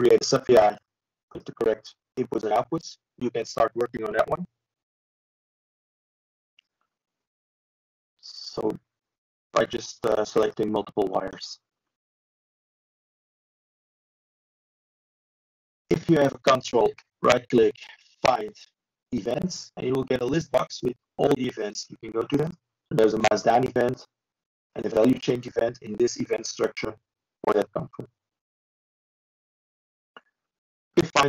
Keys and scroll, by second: 4.4 ctrl+e.